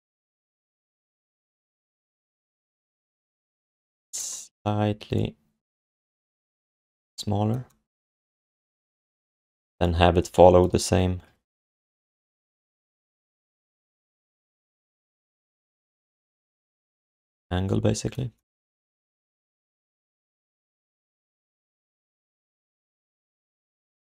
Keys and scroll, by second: 0.7 q, 1.3 alt+shift+d, 1.5 alt+q, 2.9 q, 3.6 r, 9.6 w, 11.2 4, 12.6 v, 14.5 r, 18.9 q, 20.0 5, 21.2 alt+shift+d, 23.3 alt+shift+d.